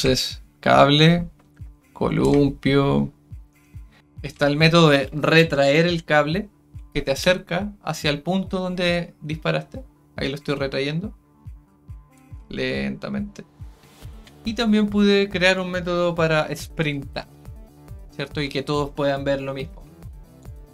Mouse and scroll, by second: 15.4 click, 20.4 click.